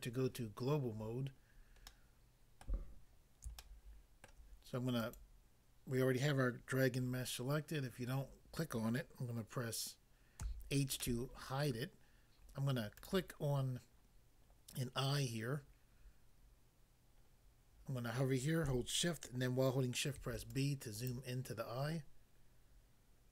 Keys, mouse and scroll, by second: 0.9 scroll down 1, 1.4 scroll down 1, 1.9 middle click, 2.6 middle click, 3.5 shift+middle click, 5.0 click, 5.2 click, 10.5 h, 11.0 middle click, 11.7 middle click, 12.9 click, 13.1 click, 20.1 b, 20.5 click, 21.1 click.